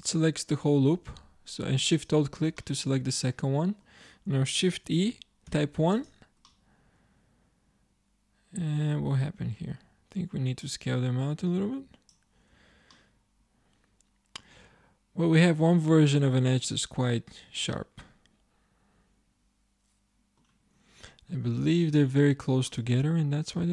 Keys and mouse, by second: 2.0 click, 2.6 middle click, 3.3-4.9 drag, 4.9 shift+e, 11.1-12.1 drag, 12.6 Tab, 20.9-22.2 middle drag, 22.2 Tab.